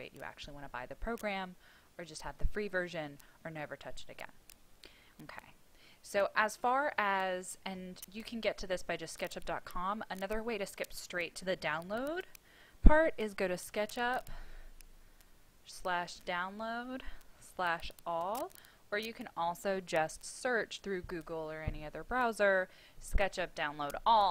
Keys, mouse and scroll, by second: 11.3-11.7 typing, 13.0-14.5 typing, 16.0 Down, 17.1-18.2 typing.